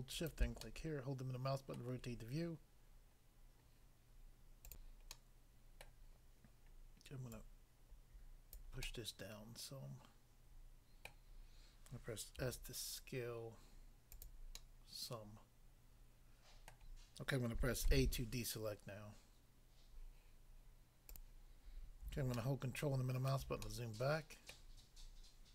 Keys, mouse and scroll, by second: 0.1 shift+click, 0.6 middle click, 1.7 middle click, 4.7 click, 4.8 click, 5.2 middle click, 5.9 middle click, 7.4 click, 8.6 click, 8.8 middle click, 11.1 middle click, 12.4 s, 14.1 click, 14.3 click, 14.6 middle click, 16.7 middle click, 17.8 a, 21.1 click, 21.2 click, 22.4 ctrl+middle click.